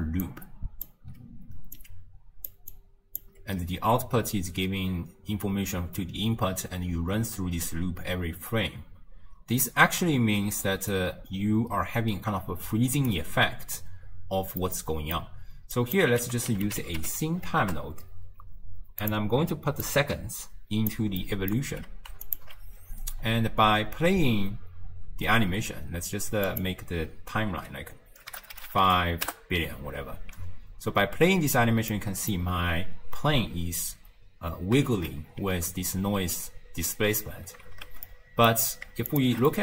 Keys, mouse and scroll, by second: 0.0-3.3 typing, 0.3-0.9 drag, 1.8 click, 2.7 click, 5.1 d, 10.6 d, 10.9-13.1 right drag, 13.1 d, 13.2 d, 14.6 scroll up 1, 14.7-15.8 middle drag, 15.8 click, 16.2 ctrl+a, 19.9 click, 21.3-22.3 middle drag, 22.3 alt+shift+click, 23.2-23.7 scroll down 1, 23.7 space, 25.5 space, 26.5-28.6 drag, 28.6 0, 28.7 0, 29.0 0, 30.4 space, 32.0 middle click, 32.5-34.0 scroll up 1, 34.0 space, 34.9 shift+space, 35.5 space, 37.4 space, 38.1-39.1 middle drag, 39.1 alt+shift+click, 39.5-39.6 middle drag.